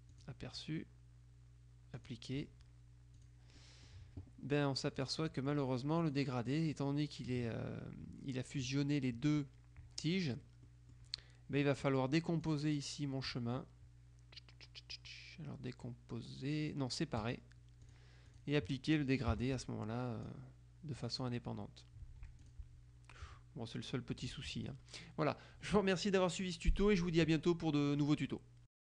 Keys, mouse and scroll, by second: 0.2 click, 2.1 click, 3.3 click, 3.7 right click, 5.0 click, 5.3 right click, 6.1 click, 10.8 click, 12.6 click, 17.3 click, 19.4 g, 19.6 click, 21.0 click, 22.4 F2, 22.5 click, 28.1 click.